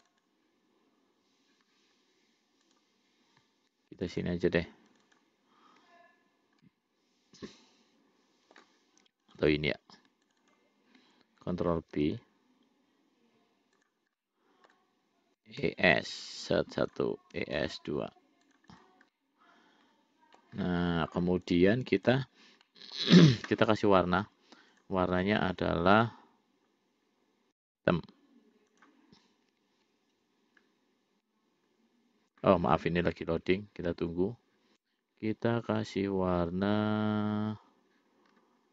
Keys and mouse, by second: 0.2 shift+click, 0.5 shift+click, 2.9 click, 4.2 shift+click, 4.5 shift+click, 5.2 shift+click, 5.5 shift+click, 6.9-8.9 middle drag, 9.5 click, 10.5 shift+click, 10.8 shift+click, 12.2 ctrl+b, 14.5 middle click, 15.7 e, 17.7 e, 19.0 click, 19.4-20.7 middle drag, 21.7 click, 22.9 middle click, 25.0 click.